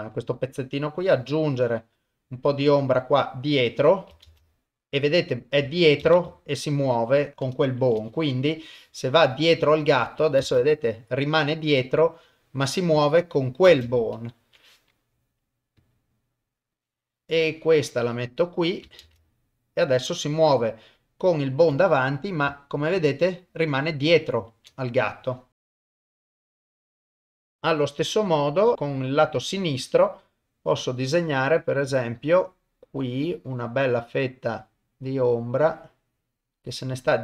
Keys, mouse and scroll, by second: 1.0 click, 4.3 shift+space, 6.0 shift+space, 7.8 shift+Left, 8.7-9.7 drag, 10.4 shift+space, 13.7 shift+space, 14.4 shift+Left, 15.8 click, 16.7-18.2 drag, 19.0 shift+space, 20.8 middle click, 21.9 ctrl+middle click, 22.6 shift+middle click, 24.5 shift+Left, 25.6 KP_0, 26.4 shift+space, 26.7 shift+Left, 26.9 shift+middle click, 27.0 ctrl+middle click, 27.2 shift+space, 27.3 shift+space, 27.6 shift+Left, 29.6 click, 32.8-36.9 drag.